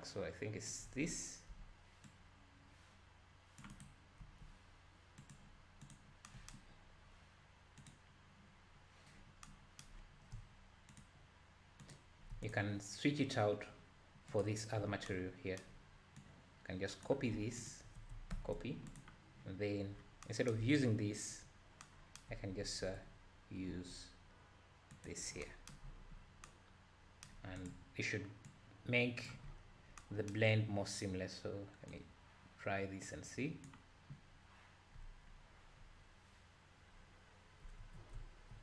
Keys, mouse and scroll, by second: 1.5 c, 4.2 g, 5.9 click, 7.0-7.7 scroll down 3, 7.8 click, 10.0-10.8 scroll up 3, 10.8 scroll up 1, 10.9 ctrl+shift+click, 12.0 ctrl+shift+click, 12.4 click, 13.2-14.2 scroll down 2, 14.2 scroll down 1, 14.4 click, 16.2 drag, 17.6 shift+click, 18.3 ctrl+c, 18.9 click, 20.0 scroll down 4, 21.6 scroll up 3, 22.7 ctrl+v, 23.7 g, 24.9 g, 25.9-26.4 scroll up 8, 27.6 click, 28.5 click, 29.5-30.0 scroll up 3, 31.9-35.1 drag, 36.0-37.2 scroll down 1, 37.2-37.8 scroll up 2, 37.8 alt+a, 38.1 `.